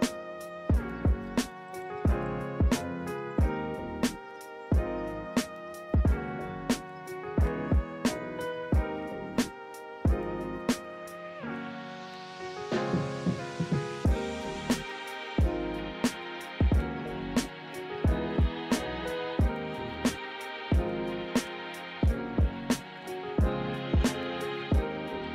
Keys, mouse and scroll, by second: 1.3 ctrl+=, 5.1 ctrl+-, 5.3 ctrl+=, 17.6 ctrl+z, 23.4 b, 25.2 ctrl+=.